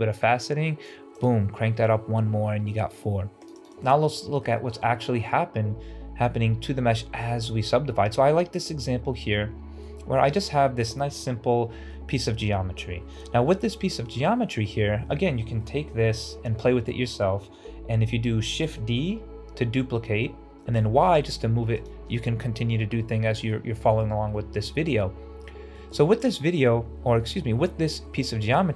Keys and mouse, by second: 1.1 click, 3.4 click, 3.6 right click, 3.6 click, 4.0 middle drag, 4.4 shift+middle drag, 9.0-9.7 middle drag, 10.1 Tab, 10.5 Tab, 11.2 ctrl+alt+z, 11.8-13.0 middle drag, 14.6-15.5 middle drag, 18.5 shift+d, 23.4-23.9 middle drag, 24.8 middle click, 25.6 shift+middle click.